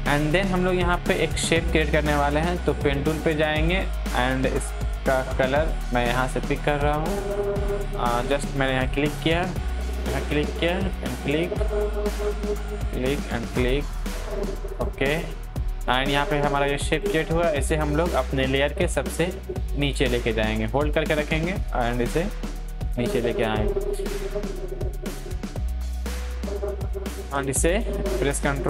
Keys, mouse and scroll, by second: 2.4-27.7 drag, 27.7 ctrl+t, 28.5-28.6 drag.